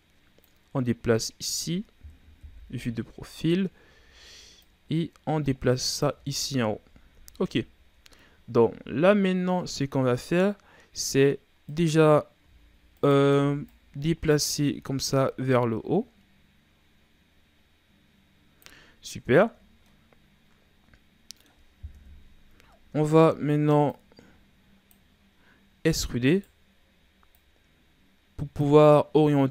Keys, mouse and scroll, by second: 0.3-2.4 drag, 2.4 KP_3, 3.4-3.8 scroll up 2, 3.8 z, 4.5-6.0 drag, 6.0 z, 6.2-6.6 scroll down 3, 6.6-7.3 ctrl+scroll up 3, 7.3-8.4 scroll up 5, 8.4-10.5 ctrl+scroll down 1, 11.6 right click, 12.3 z, 12.9 right click, 13.3 b, 14.3 z, 15.1-18.1 drag, 18.8-19.3 scroll down 2, 19.3-19.8 shift+scroll up 4, 19.8-21.8 middle drag, 21.8 KP_3, 22.7-23.8 shift+scroll up 5, 23.3 middle click, 23.8-25.9 drag, 25.9 e, 27.2-29.5 drag.